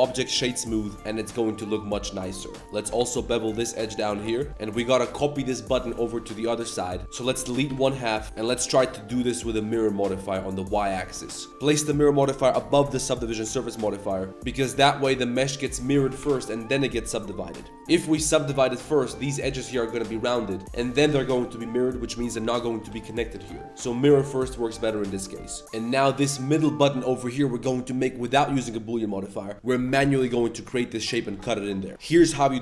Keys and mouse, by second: 0.6 middle drag, 1.1-1.7 middle drag, 2.0 middle drag, 2.4 Tab, 2.5 middle click, 2.6 2, 2.8 ctrl+b, 4.2 Tab, 4.3 middle click, 4.5 Tab, 4.7 middle click, 7.0-7.7 typing, 8.2 Tab, 8.2-9.6 drag, 10.4 click, 10.6 click, 11.1 middle drag, 12.0-12.5 drag, 13.4 z, 14.9 Tab, 16.2 Tab, 18.3 Tab, 18.6 1, 19.0 middle click, 19.9 click, 20.3 Tab, 22.0 Tab, 22.3 1, 22.6 click, 22.8 g, 23.4 Tab, 23.8-24.3 drag, 24.9 click, 25.2 Tab, 25.4 click, 25.6 3.